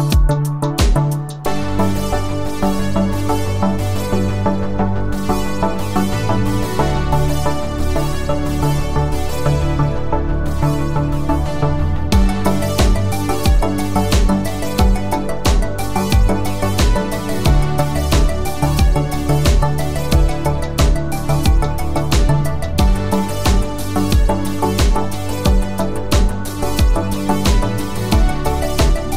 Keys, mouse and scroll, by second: 0.6 click, 11.3 click, 13.5 click, 17.5 click, 23.4 click, 27.1 click.